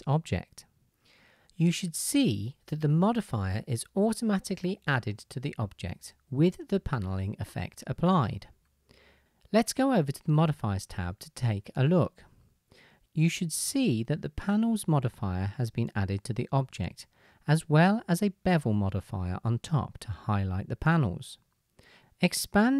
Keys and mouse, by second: 0.0-22.7 drag.